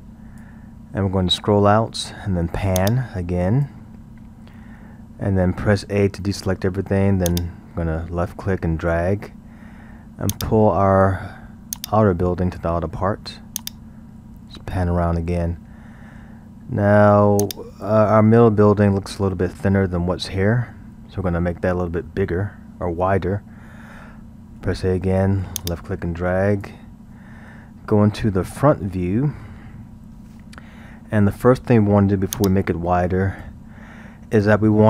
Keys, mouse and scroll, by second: 1.2-2.8 scroll, 2.8-4.1 drag, 4.1-4.7 scroll, 6.0 a, 7.3 drag, 10.3-15.2 drag, 15.2 scroll, 17.4-20.5 drag, 24.6 a, 25.6 drag, 28.8 KP_1, 29.8-31.3 scroll, 32.3-34.8 drag.